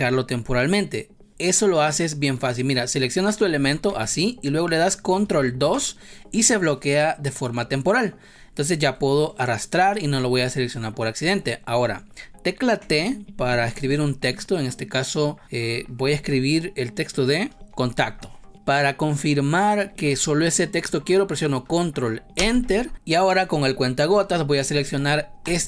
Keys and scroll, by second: 3.8 ctrl+z, 5.6 ctrl+2, 12.8 t, 17.5 ctrl+Return, 22.3 ctrl+Return.